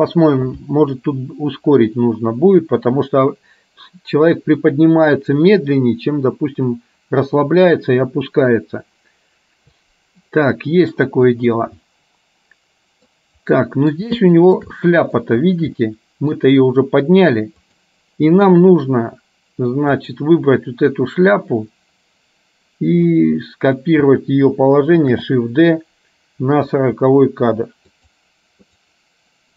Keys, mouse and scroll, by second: 11.6-13.2 middle drag, 13.7 middle click, 14.3 shift+middle click, 14.9 middle click, 15.9 middle click, 17.9 click, 19.9 click, 23.3 click, 25.2 shift+d, 28.9 click.